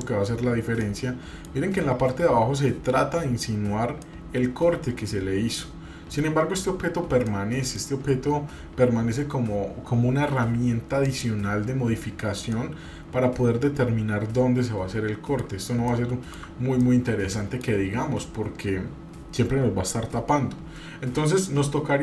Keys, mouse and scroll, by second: 0.9 middle click, 1.7-2.7 scroll up 2, 4.0-6.2 middle drag, 7.3 middle click, 11.0 click, 12.5-15.5 middle drag, 15.9 shift+middle click, 16.8 middle click.